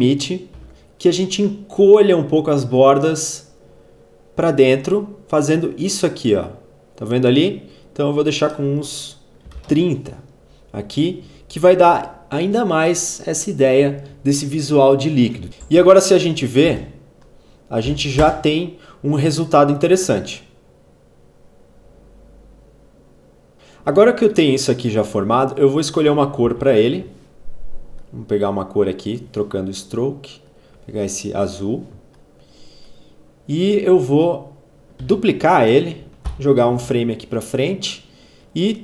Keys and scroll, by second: 0.5 ctrl+z, 9.0-9.8 typing, 15.6 space, 17.8 n, 18.1 space, 23.5 space, 26.5 v, 34.8 ctrl+d, 36.0 alt+Page_Up.